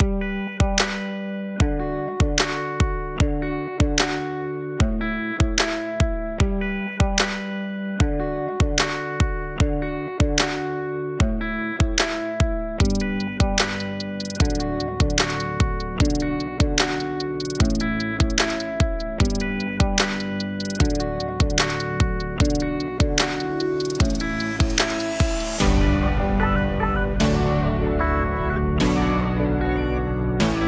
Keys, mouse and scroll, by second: 1.1-3.7 drag, 4.0 middle click, 4.5 click, 6.4-8.6 middle drag, 8.6-9.6 drag, 9.6 scroll down 1, 9.8-10.4 middle drag, 10.4-10.7 scroll up 1, 10.7-11.8 middle drag, 11.8-14.3 drag, 15.0-17.5 drag, 18.5 middle click, 19.1 scroll up 1, 19.5 middle click, 20.4-22.6 drag, 23.9-28.3 middle drag, 28.3-30.4 drag, 30.4-30.6 middle drag.